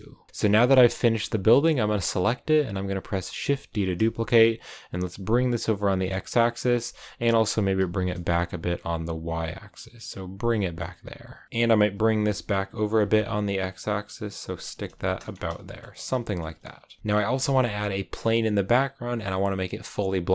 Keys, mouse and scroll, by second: 0.4 right click, 1.1-2.5 scroll down 1, 3.2 shift+d, 7.5 g, 11.4 g, 14.4 scroll down 2, 14.6 a, 15.2-15.5 scroll up 3, 15.5 shift+middle click, 15.9-16.3 scroll down 2, 16.3 shift+middle click, 16.6-17.0 scroll up 2, 17.0 a, 18.0-20.3 scroll down 2.